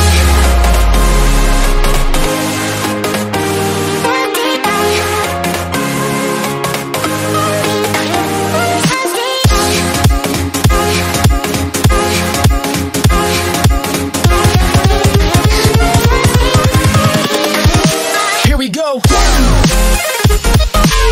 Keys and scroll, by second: 7.5 ctrl+z.